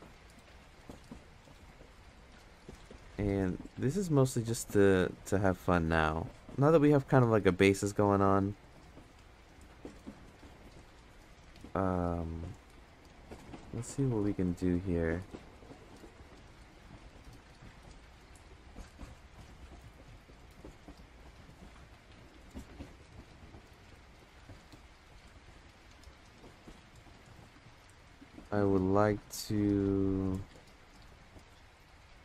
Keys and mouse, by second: 7.8 click, 9.2-13.1 drag, 15.0-16.1 drag, 17.7 ctrl+z, 18.3 click, 19.4 ctrl+z, 22.6 click, 24.6-25.9 drag, 26.8 ctrl+z, 29.1 click, 31.8-32.2 drag.